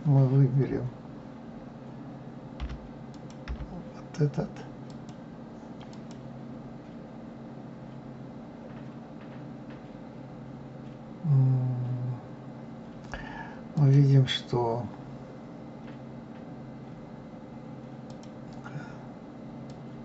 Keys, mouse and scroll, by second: 2.5 l, 3.1 click, 3.5 l, 4.9 click, 5.9 click, 13.7 click, 18.1-20.0 drag.